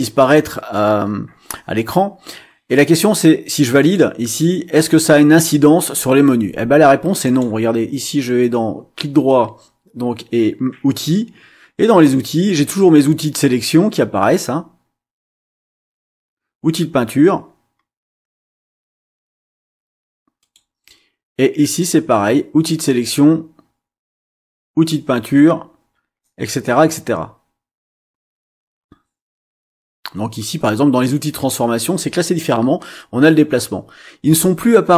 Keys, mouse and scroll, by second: 3.8 click, 7.2 click, 20.4 click, 21.6 click.